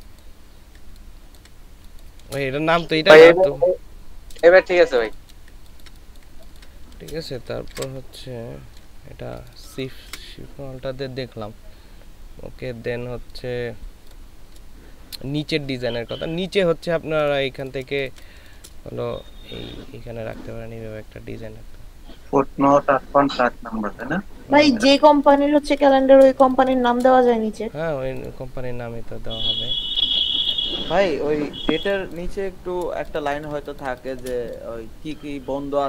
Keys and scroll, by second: 0.8 ctrl+space, 4.9 ctrl+space, 5.5 ctrl+space, 17.9 ctrl+space, 25.6 ctrl+space, 26.5 ctrl+space.